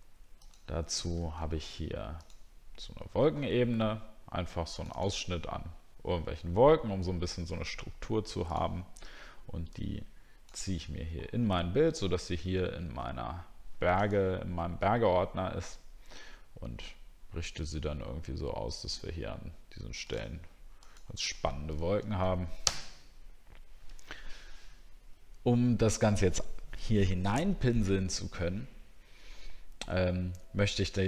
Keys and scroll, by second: 1.2 alt+Tab.